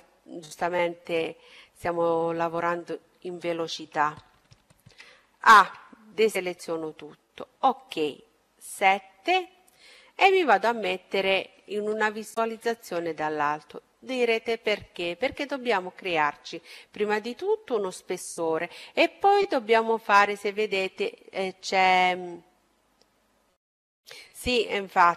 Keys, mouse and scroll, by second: 0.0-2.2 middle drag, 2.4-4.2 middle drag, 3.7 a, 5.0-6.7 middle drag, 6.7 KP_7, 10.1-12.0 middle drag.